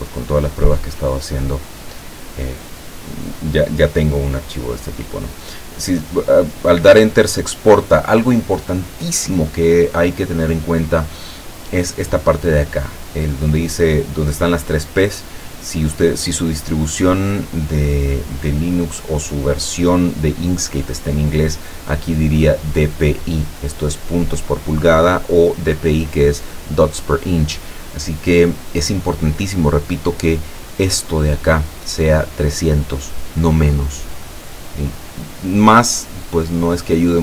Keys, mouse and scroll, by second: 30.8 click.